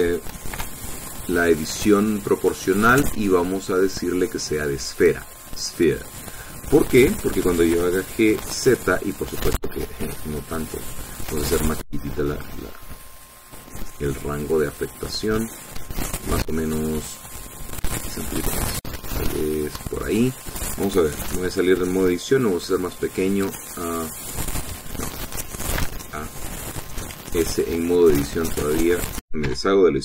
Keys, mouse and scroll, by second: 1.6 o, 3.7 click, 6.0 click, 8.7 g, 9.5 z, 10.0-11.1 scroll up 6, 11.4-11.8 scroll up 2, 12.0 scroll up 2, 13.8 scroll down 2, 21.1 click, 22.4 Tab, 23.4 s, 24.5 Escape, 25.8 Tab, 26.8 a, 28.0 s, 29.6 Escape.